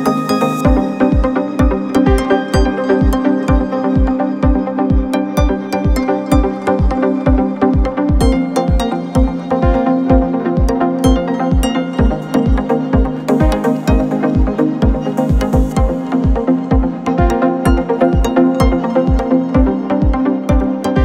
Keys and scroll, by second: 1.4 F1, 3.5 4, 9.3 ctrl+d, 9.4 Escape, 10.9 ctrl+z, 11.3 F1, 18.4 ctrl+d, 18.4 Escape, 20.1 Delete, 20.7 ctrl+z.